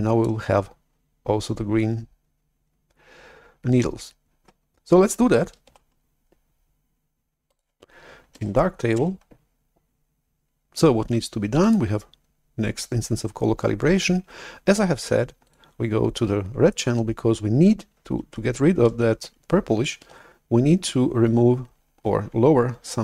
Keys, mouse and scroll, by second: 5.7 shift+super+F11, 7.4 click, 8.2 alt+Tab, 9.2 alt+Tab, 11.5-14.1 drag, 15.4 click, 20.2 shift+super+F11.